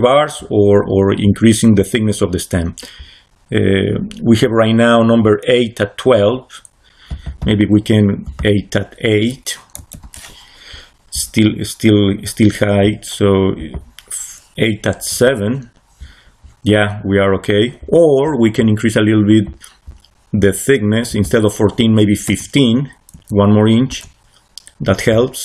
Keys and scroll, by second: 9.7 8, 9.9 Return, 15.0 7, 15.1 Return, 22.1 1, 23.0 5, 23.8 Return.